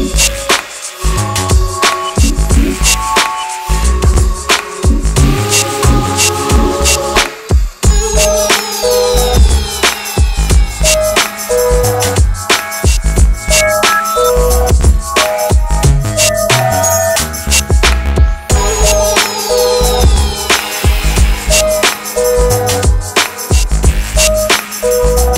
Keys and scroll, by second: 13.4 Delete.